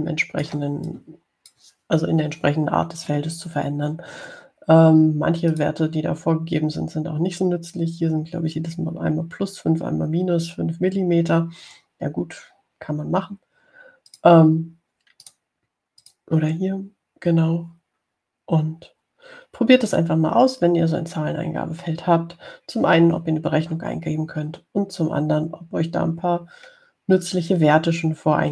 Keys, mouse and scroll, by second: 0.7-2.0 ctrl+drag, 2.2 click, 6.8 right click, 15.4 click, 16.5 right click, 17.3 click.